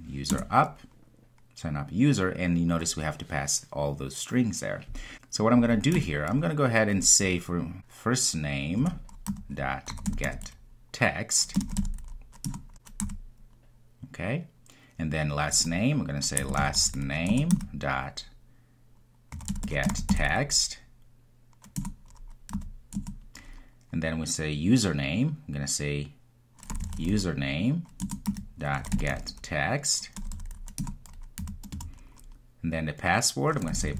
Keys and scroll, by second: 8.8 Return, 17.4 Return, 21.8 Return, 28.0 Return.